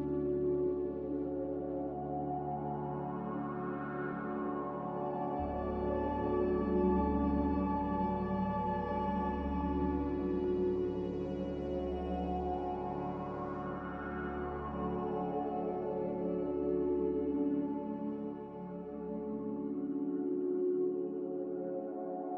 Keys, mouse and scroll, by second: 2.3-3.9 typing, 6.2-6.9 typing, 17.1 g, 17.8 Escape, 18.2 x, 19.3-20.1 typing.